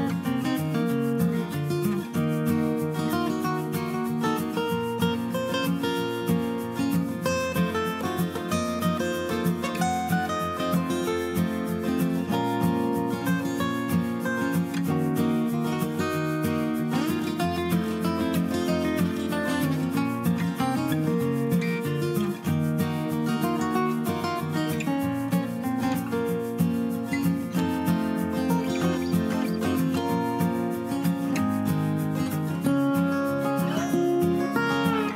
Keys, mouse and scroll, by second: 30.0 1.